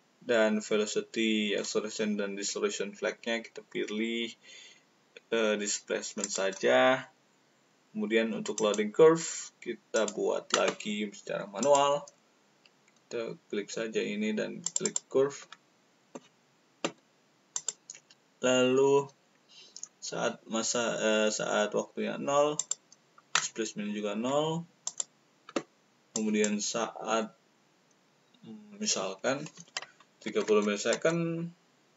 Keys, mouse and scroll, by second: 6.2 click, 8.5 click, 9.9 click, 11.5 click, 12.7 click, 14.6 click, 14.7 click, 17.5 click, 22.5 click, 24.8 alt+click, 30.2 alt+3.